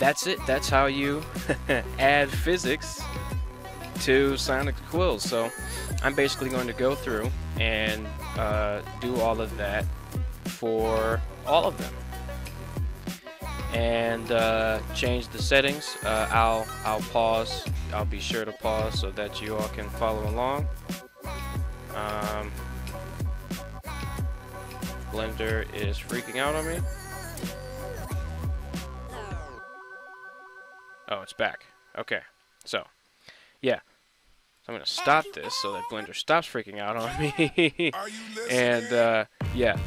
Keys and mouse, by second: 0.9 middle click, 2.0 r, 2.6 r, 4.4 right click, 5.3 middle drag, 6.3 right click, 8.4 right click, 8.8 click, 10.5 drag, 11.6 click, 11.9 click, 12.6 click, 31.4-32.3 middle drag, 34.6 click, 35.5-36.4 middle drag, 36.8 middle drag, 37.4 middle drag, 38.2-38.7 middle drag, 38.8 middle click, 39.6 right click.